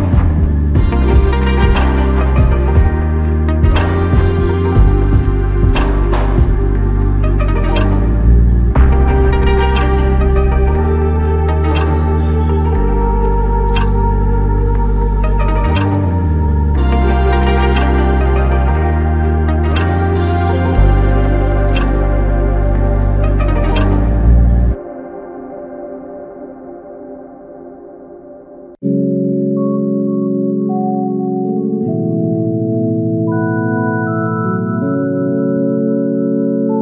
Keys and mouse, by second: 0.1 alt+click, 4.6 double click, 7.3 shift+click, 11.5 double click, 16.2 double click, 17.1 alt+click, 19.0-19.8 typing, 21.8 double click, 25.5 alt+click, 26.5-27.3 typing, 29.2 double click.